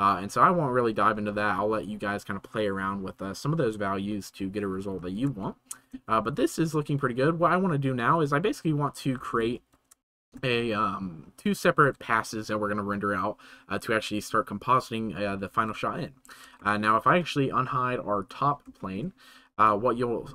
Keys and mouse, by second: 5.5-5.8 shift+middle drag, 6.0 space, 9.1 space, 10.0-10.3 shift+middle drag, 16.5 middle drag, 18.8 middle click, 19.6-20.3 drag.